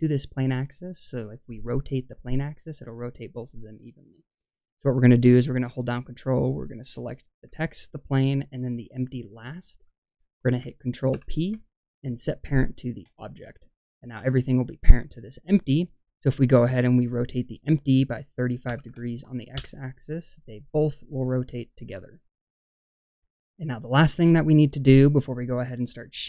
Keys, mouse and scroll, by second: 6.1 click, 7.6 ctrl+click, 9.2 ctrl+click, 11.0 ctrl+p, 16.5-19.5 drag, 23.3-24.3 scroll up 1, 24.3-26.2 middle drag, 24.3-25.4 scroll up 1.